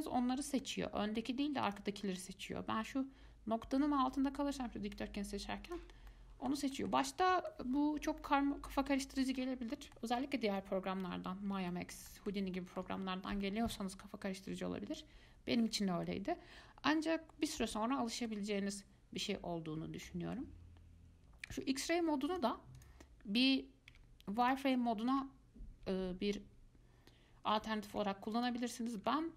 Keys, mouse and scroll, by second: 0.8-1.9 middle drag, 1.9 click, 2.4 click, 5.9 click, 6.3-8.0 middle drag, 8.0-8.4 scroll up 1, 8.4-16.6 middle drag, 17.8-21.7 middle drag, 21.7 click, 24.1 z, 25.3 z.